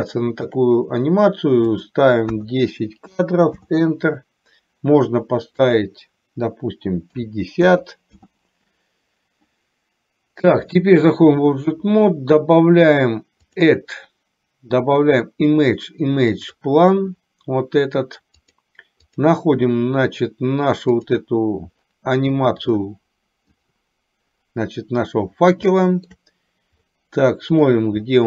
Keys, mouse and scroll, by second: 0.2 shift+middle click, 1.8-3.8 drag, 5.8-8.3 drag, 10.8 click, 13.7-17.1 drag, 25.8 shift+middle click, 27.1 middle click.